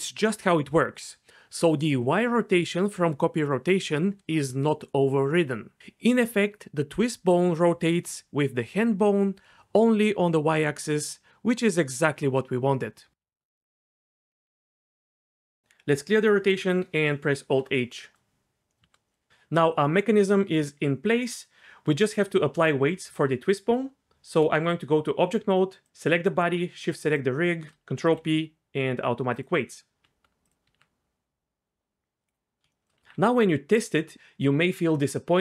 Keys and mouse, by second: 14.5 alt+r, 15.5 shift+middle click, 17.4 alt+h, 17.9 click, 18.7-19.1 shift+middle drag, 19.2-20.9 middle drag, 23.7 Tab, 25.8 click, 27.0 shift+click, 28.1 ctrl+p, 30.0 Tab, 30.6 r, 30.7 r, 32.9 r, 33.1 r.